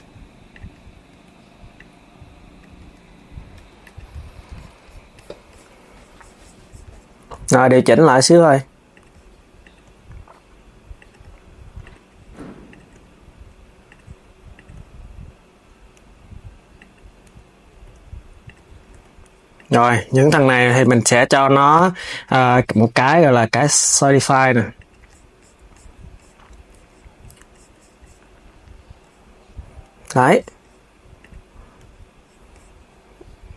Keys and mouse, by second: 0.2 click, 0.8 KP_1, 1.4 click, 2.3 KP_3, 3.2 Tab, 3.5 click, 3.9 s, 7.0 Tab, 7.5 click, 7.9 g, 9.3 click, 9.5 g, 11.5 click, 12.4 click, 12.6 g, 14.2 click, 16.9 KP_1, 17.5 g, 18.3 KP_3, 18.6 Tab, 19.3 click, 20.0 s, 21.2-21.7 drag, 22.0-24.6 drag, 30.9 click.